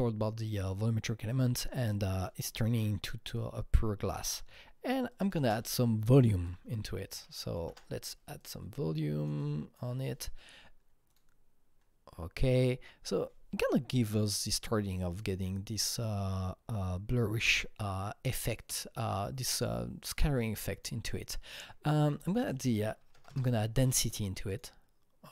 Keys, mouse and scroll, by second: 1.3-3.1 drag, 3.1 click, 3.8-6.2 drag, 5.4 ctrl+space, 6.0-7.0 typing, 7.1 Down, 7.7 Return, 8.7 Return, 8.7 Down, 8.7 click, 9.4-13.8 drag, 20.7-22.1 drag, 22.1 click, 22.3 double click, 23.0 KP_1, 23.2 KP_0, 23.3 KP_Enter, 25.2 KP_Enter, 25.2 click, 25.2 KP_0.